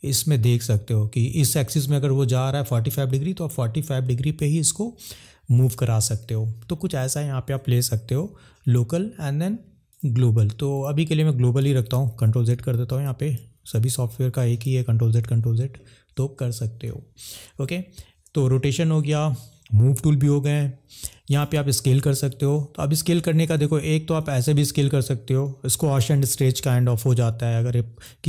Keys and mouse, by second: 8.6-10.2 drag, 10.7 click, 11.8 ctrl+z, 12.0 ctrl+z, 12.1 ctrl+z, 12.6 ctrl+z, 12.7 ctrl+z, 13.1 ctrl+z, 13.4 ctrl+z, 13.7 ctrl+z, 14.0 ctrl+z, 14.3 ctrl+z, 14.7 ctrl+z, 21.4 click, 24.1 click, 26.1 ctrl+z.